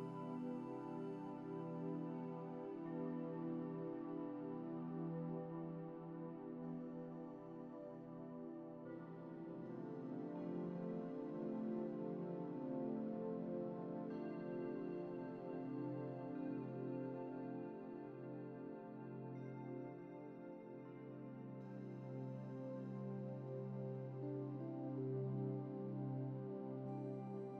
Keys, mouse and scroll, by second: 6.6-8.3 middle drag, 21.2-23.7 middle drag.